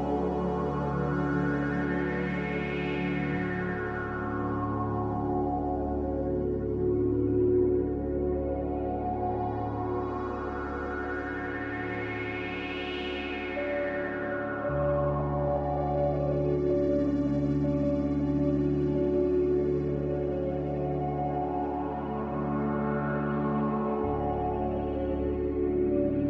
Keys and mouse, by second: 2.0 g, 4.0 click, 4.6 g, 7.7 click, 8.3 g, 10.2 click, 11.4 g, 15.0-17.6 middle drag, 18.0 middle click, 19.2-20.2 middle drag, 20.8 ctrl+z, 21.0 ctrl+z, 21.2 ctrl+z, 21.4 ctrl+z, 21.7 ctrl+z, 21.8 ctrl+z, 22.0 ctrl+z, 22.3 ctrl+z, 23.7 ctrl+z.